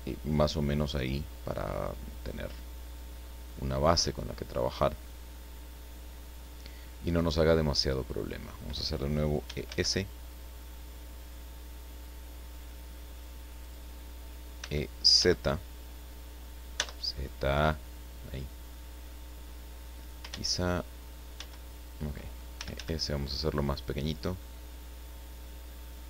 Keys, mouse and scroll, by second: 3.8 scroll down 1, 4.3-6.6 drag, 8.1 scroll up 1, 9.4 e, 9.6 s, 13.6 click, 14.6 e, 15.1 z, 16.7 z, 20.0 click, 20.2 ctrl+z, 21.3 ctrl+z, 22.5 ctrl+e.